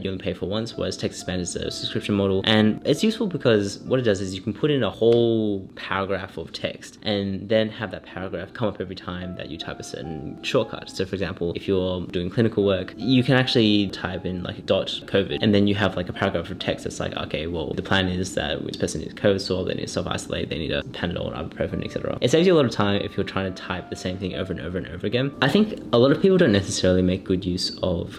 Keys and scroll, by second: 9.5-11.8 typing, 13.1 shift+c.